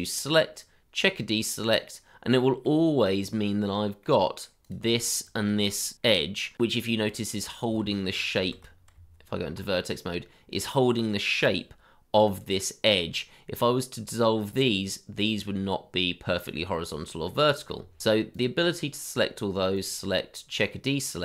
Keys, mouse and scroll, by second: 2.7 middle click, 5.3 shift+click, 5.8 middle click, 7.8 shift+z, 8.9 Tab, 9.9-11.0 scroll up 1, 13.1-15.2 scroll down 1, 17.4 middle click, 17.7 Tab.